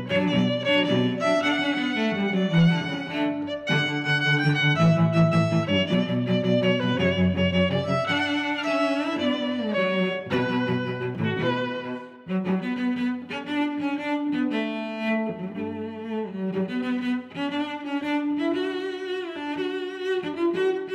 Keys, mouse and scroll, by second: 2.3 middle click, 2.6 click, 3.4 click, 4.5 click, 5.3 click, 5.4 click, 5.7-7.4 typing, 7.4 Return, 7.6 Return, 9.3 Tab, 9.8 middle click, 10.6 middle click, 11.4 click, 13.0 shift+3, 13.4 click, 13.7 click, 14.3 click, 14.6 middle click, 15.6 click, 16.5 click, 16.8 middle click, 18.2 click, 19.0 click, 19.4 middle click, 20.5 click.